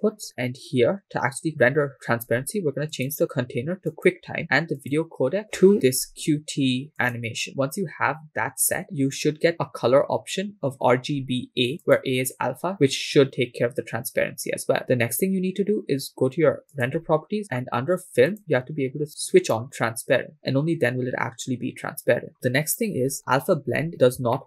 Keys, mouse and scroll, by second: 2.9-4.1 drag, 4.8-7.2 drag, 11.9 click, 16.7 click, 17.7-18.2 scroll down 1, 18.5 click, 19.5-21.6 drag, 23.7-24.4 scroll up 4.